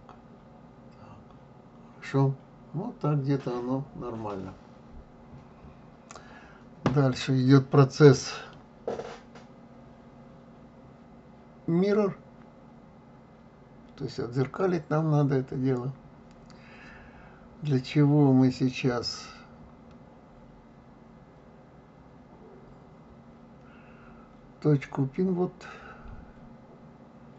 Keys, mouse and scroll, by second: 19.2-22.2 middle drag.